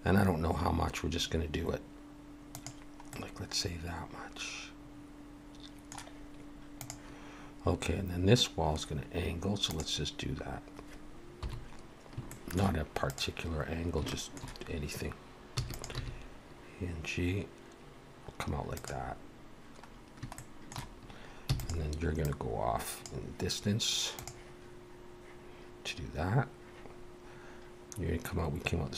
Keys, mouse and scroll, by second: 3.1 middle click, 11.4 KP_7, 12.3 shift+middle click, 13.1 click, 14.1 shift+middle click, 15.6 e, 15.9 g, 19.3-19.9 scroll down 1, 19.9-20.2 scroll down 1, 20.4 shift+middle click, 21.5 e, 22.2 click.